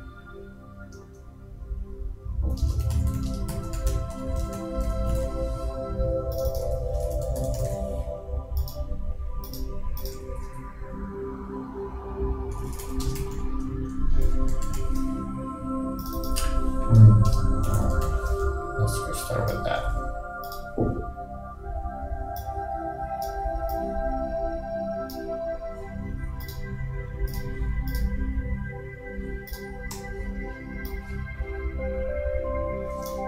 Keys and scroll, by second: 2.7 shift+space, 2.8 shift+b, 3.3 shift+space, 3.5 shift+p, 13.1 shift+space, 13.2 shift+9, 17.3 shift+space, 17.7 shift+b.